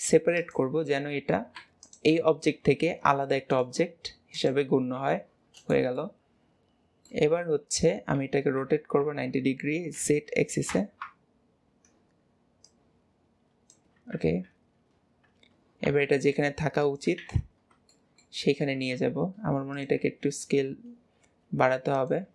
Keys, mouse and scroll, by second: 1.9 click, 4.4 click, 6.0-8.2 middle drag, 12.7 click, 15.0 scroll down 4, 15.9 g, 17.2 alt+z, 17.6 scroll up 1, 18.0-18.4 shift+middle drag, 18.5 scroll up 1.